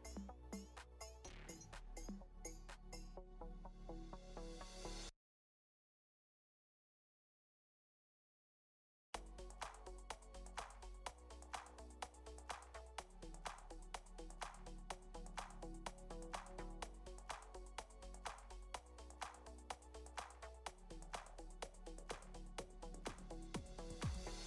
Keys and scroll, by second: 1.1 ctrl+space, 2.7 space, 4.0 space, 9.9 space, 10.7 space, 12.5 space.